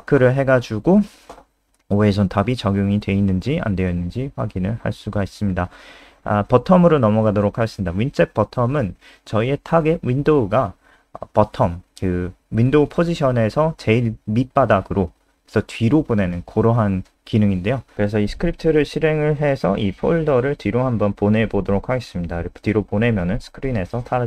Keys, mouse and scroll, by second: 1.8-2.7 scroll down 2, 2.2 click, 3.7 ctrl+c, 3.9 click, 4.2 click, 4.9 ctrl+v, 5.0 scroll up 3, 6.0 click, 7.1 click, 7.4 click, 7.4-7.9 scroll down 2, 8.6 shift+Home, 8.9 BackSpace, 9.1 BackSpace, 10.5 F3, 11.9 click, 17.0 click, 17.3 F5, 18.5 F3, 19.7 click, 21.4 b.